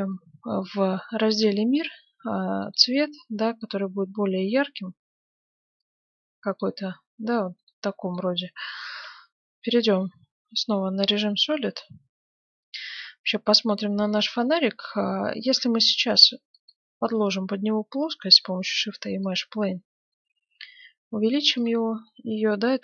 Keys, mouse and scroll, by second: 2.6-4.6 drag, 7.9-9.5 middle drag, 9.1 shift+z, 9.6-11.6 middle drag, 16.5-18.3 drag, 16.9 shift+a, 20.0 s, 22.1-22.8 middle drag.